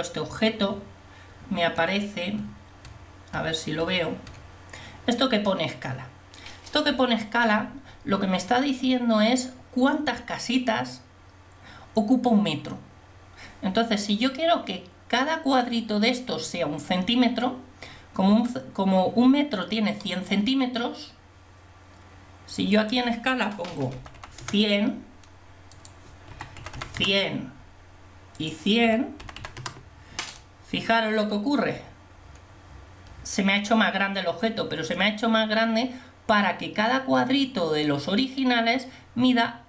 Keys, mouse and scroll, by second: 22.8-24.2 drag, 24.2 0, 26.8 0, 29.4 0.